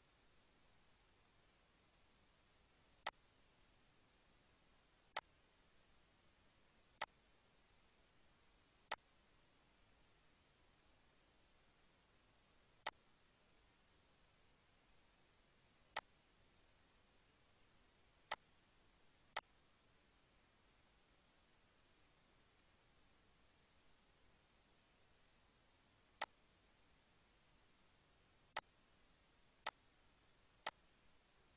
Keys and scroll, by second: 30.0 z.